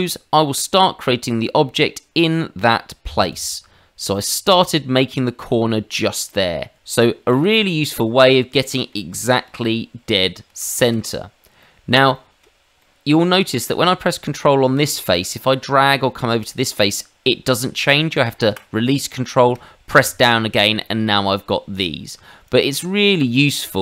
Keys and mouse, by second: 0.7 ctrl+click, 4.5 ctrl+click, 6.8 ctrl+middle click, 7.4 middle click, 9.4 ctrl+z, 10.5 ctrl+z, 11.6 middle click, 12.1 shift+middle click, 12.8 middle click, 22.5 ctrl+click.